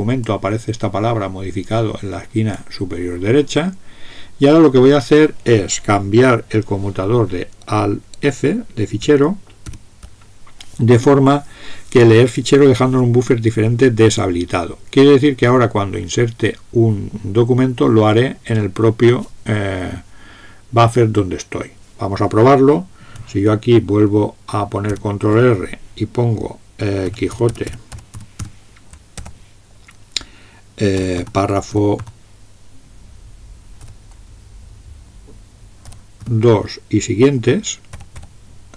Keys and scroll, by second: 9.7 alt+f, 24.9 ctrl+r, 26.8-29.1 typing, 30.8-32.5 typing, 35.9-36.2 typing.